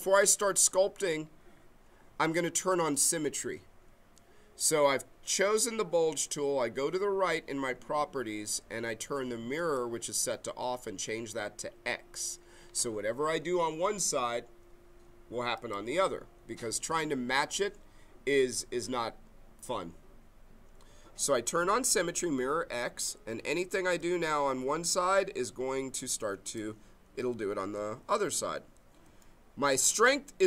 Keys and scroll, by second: 28.2 ctrl+z.